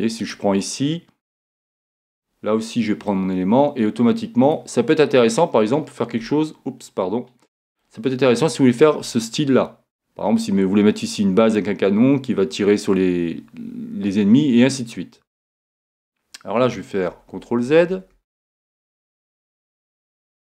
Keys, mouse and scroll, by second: 0.2-2.0 right drag, 3.1-4.9 drag, 5.3-7.2 middle drag, 7.8-16.7 middle drag, 17.1 super+z, 17.3 super+z, 17.6 super+z, 18.1 z, 18.4 z, 18.7 z, 19.0 z, 19.7-20.5 middle drag.